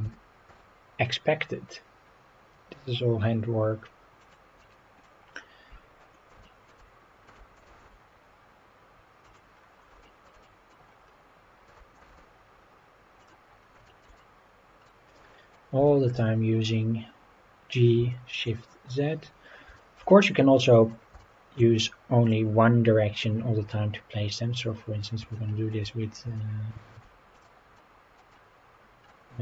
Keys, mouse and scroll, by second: 0.0 g, 0.5 z, 4.2 click, 4.6-5.0 middle drag, 5.2-5.6 scroll up 3, 5.9 scroll down 2, 6.4-6.7 shift+middle drag, 7.2 g, 7.7 shift+z, 9.2 click, 9.5 scroll down 2, 10.0 shift+middle drag, 10.4 middle drag, 10.8-11.1 scroll up 3, 11.7 g, 12.0 shift+z, 13.2 click, 13.5 scroll down 2, 13.8 shift+middle drag, 14.2-14.8 middle drag, 15.2-15.5 middle drag, 15.9 shift+middle drag, 16.5-16.9 scroll down 2, 18.1 shift+middle drag, 19.8 shift+middle drag, 20.2-20.9 middle drag, 21.2 shift+middle click, 22.2 click, 23.1-24.1 scroll up 6, 25.3-25.7 shift+middle drag, 26.0 scroll down 2, 26.4-26.9 shift+middle drag, 27.3 click, 27.8-28.2 middle drag, 28.3-29.1 middle drag.